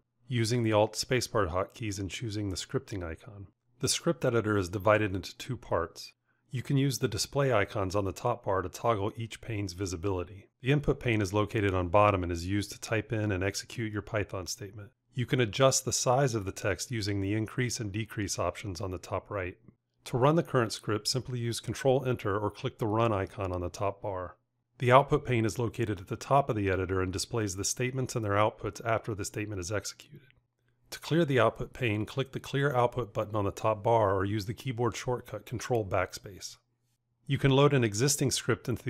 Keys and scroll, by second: 21.8 ctrl+Return, 34.5 ctrl+BackSpace.